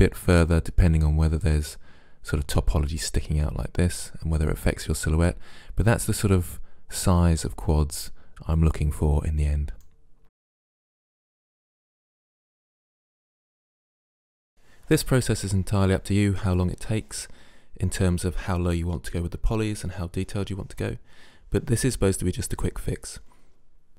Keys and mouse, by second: 9.9 middle click, 10.9 Delete, 11.8 Delete, 12.1 click, 12.7 Delete, 12.9 click, 13.9 right click, 14.2 Delete, 14.6 right click, 15.0 Delete, 17.1 Delete, 18.2 right click, 18.3 middle click, 19.7 click, 20.1 middle click, 20.5 click, 21.1 middle click, 21.5 Delete, 22.5 Delete.